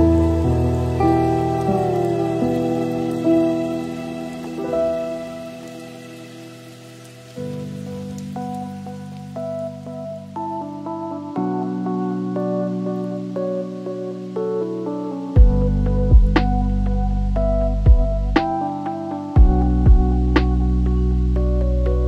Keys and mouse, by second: 0.2 g, 1.7-4.5 drag, 5.4 g, 7.3-8.3 shift+middle drag, 8.7 g, 12.8 click, 13.1 click, 13.8 click, 14.3-16.6 shift+drag, 19.7-21.7 drag, 21.7 s.